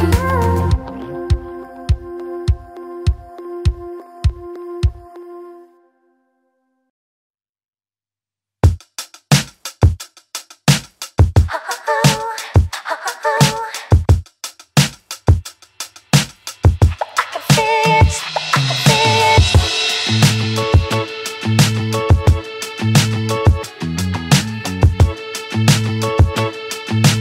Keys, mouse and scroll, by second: 0.1-0.6 alt+drag, 1.0 f, 1.2 click, 1.3 alt+click, 2.5 shift+click, 2.8 shift+click, 3.1 f, 3.3 click, 3.4 alt+right click, 3.6 alt+click, 3.7 alt+middle click, 3.9 alt+right click, 4.1 alt+click, 4.2 alt+middle click, 4.6 `, 4.9 alt+middle click, 5.0 scroll up 4, 5.2 alt+middle click, 5.4 click, 6.0 f, 6.3 click, 7.1 shift+click, 7.8 f, 7.9 click, 8.1 alt+middle click, 8.7 click, 9.3 ctrl+click, 9.7 f, 10.0 click, 11.0 alt+middle click, 11.3 alt+right click, 11.5 alt+click, 13.2 click, 13.3 alt+click, 14.6 alt+middle click, 15.2 alt+middle click, 15.4-16.2 scroll up 2, 15.6 alt+middle click, 16.2 a, 16.7 ctrl+click, 18.3 ctrl+click, 18.5 alt+middle click, 19.1 ctrl+click, 19.4 ctrl+drag, 19.7 alt+middle click, 20.4 f, 20.6 alt+right click, 20.8-21.8 alt+drag, 21.8 alt+right click, 22.0 alt+click, 22.4 ctrl+z, 22.7 f, 22.9 click, 23.2 click, 23.4 click, 23.6 click, 24.9 ctrl+z, 25.1 ctrl+z, 26.7 z.